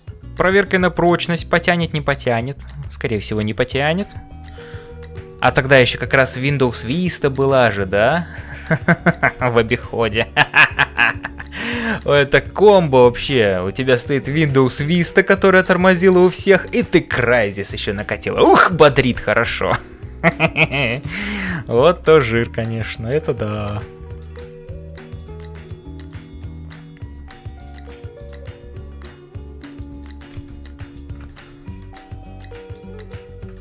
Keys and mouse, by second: 0.0-33.6 typing, 0.6-2.8 middle drag, 3.5 click, 11.9 middle click, 19.8 middle click, 21.3 middle click, 23.0 middle click, 23.5 click, 23.9 middle click, 25.4 middle click, 26.5 middle click, 28.1 click, 30.3 middle click, 31.2 shift+middle click, 31.9 middle click, 33.5 shift+middle click.